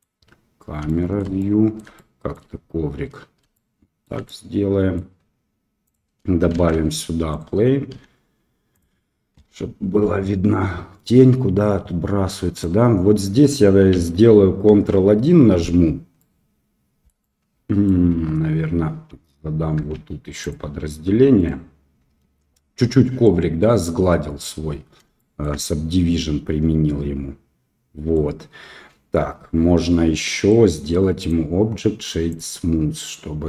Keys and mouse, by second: 0.9 shift+middle click, 1.4 middle click, 1.9 shift+middle click, 3.5 shift+middle click, 4.2 middle click, 5.8 click, 6.5 shift+a, 7.9 s, 9.3 KP_1, 12.5 right click, 15.4 ctrl+1, 16.2-17.0 middle drag, 17.2-17.8 middle drag, 18.4 Tab, 22.7 Tab, 23.3 middle drag, 25.1 shift+middle drag, 25.6-28.1 middle drag, 30.1 middle click.